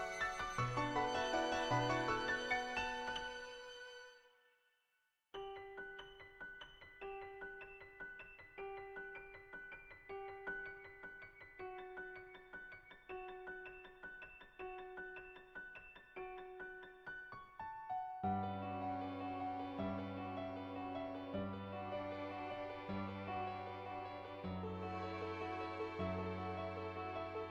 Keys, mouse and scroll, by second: 2.5 click, 4.1-6.0 middle drag, 6.2 middle click, 8.2-10.0 drag, 10.6 click, 11.2-13.1 middle drag, 13.2 shift+middle click, 13.7 shift+middle click, 13.9 middle click, 15.0-16.1 shift+middle drag, 16.9 click, 18.8 middle click, 19.8 shift+middle click, 20.0 middle click, 21.8 click, 22.6 ctrl+z, 22.7 [, 23.1 [, 23.3 click, 23.8 ctrl+z, 24.0 [, 24.0 [, 24.4 click, 26.2 click.